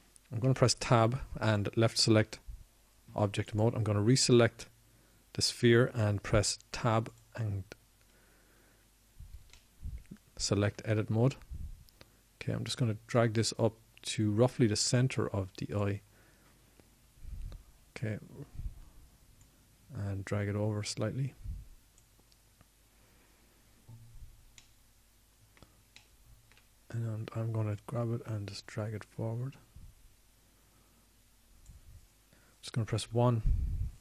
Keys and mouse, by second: 3.9 Tab, 6.8 Tab, 16.1 middle click, 27.8-31.0 middle drag, 31.0-33.4 drag.